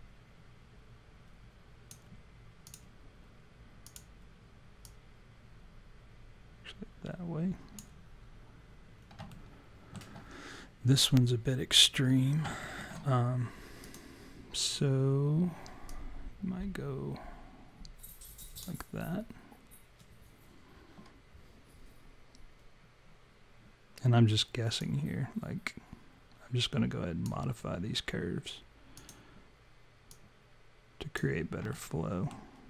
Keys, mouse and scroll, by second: 2.7 click, 3.9 click, 4.9 click, 9.3 alt+middle click, 12.0-12.3 scroll down 3, 12.7 alt+middle click, 13.8 click, 15.9 click, 24.8 click, 28.9 click, 30.2 click, 31.7 alt+middle click.